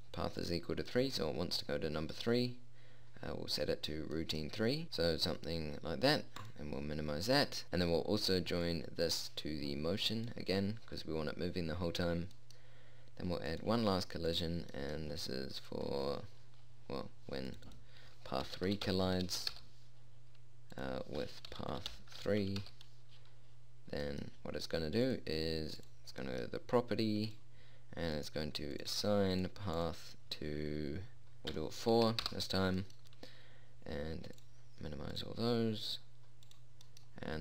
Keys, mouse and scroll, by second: 1.4-2.7 drag, 4.9-7.7 drag, 9.1-12.9 drag, 14.0 click, 17.9 middle click, 20.1-21.3 middle drag, 23.1-24.6 middle drag, 25.6-27.3 drag, 27.9-31.4 drag, 34.9-37.4 drag.